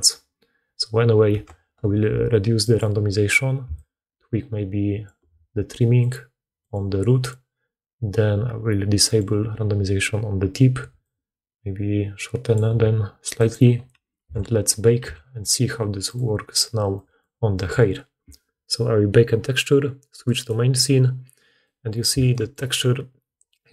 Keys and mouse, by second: 2.6 click, 2.7 middle click, 3.5-6.0 shift+drag, 6.0 middle click, 6.5 click, 7.1 click, 9.0 click, 11.8-13.4 shift+drag, 14.1 a, 14.9 a, 15.9-23.7 drag.